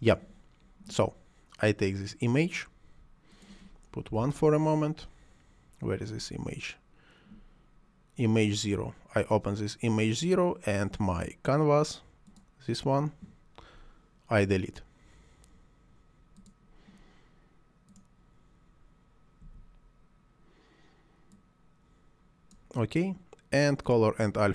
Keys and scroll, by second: 4.1 1, 4.2 Return, 19.4 Delete.